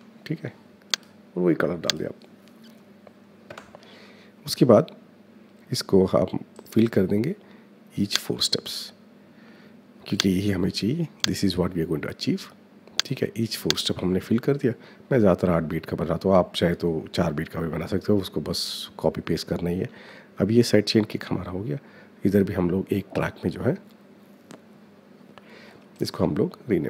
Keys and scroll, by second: 0.0-0.3 typing, 3.2 Return.